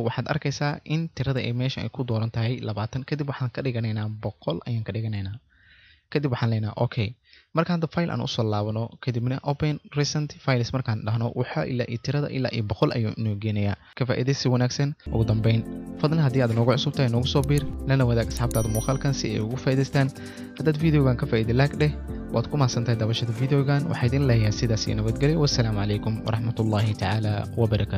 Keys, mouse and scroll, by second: 6.5 click, 7.0 click, 10.8 click.